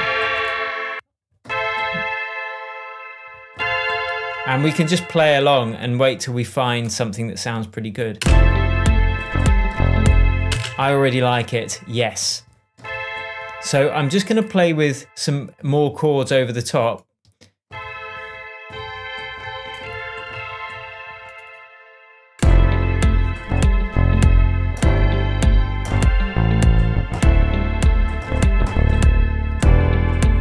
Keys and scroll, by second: 8.1 space, 10.5 space.